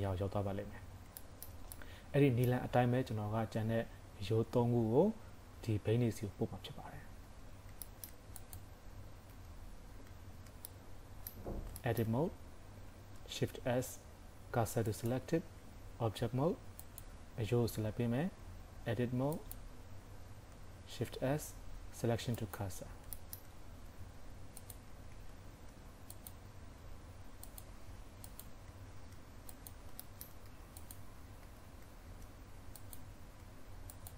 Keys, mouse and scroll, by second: 0.9 scroll down 3, 1.3 shift+middle click, 1.8 middle click, 7.3 Tab, 7.9 shift+middle click, 8.4 click, 9.3 Tab, 10.7 middle click, 11.5 scroll up 1, 11.8 shift+middle click, 12.1 scroll up 2, 13.3 shift+s, 15.6 Tab, 16.8 click, 18.3 Tab, 19.3 click, 20.9 shift+s, 23.1 shift+middle click, 23.5-23.9 scroll down 2, 23.9 Tab, 24.6 click, 24.9 Tab, 25.5 shift+s, 26.8 Tab, 27.5 click, 28.0 Tab, 28.3 click, 29.0 shift+s, 30.1 shift+middle click, 30.5 Tab, 30.8 click, 31.3 scroll up 2, 31.5 Tab, 32.1 shift+s, 33.4 Tab, 33.9 click.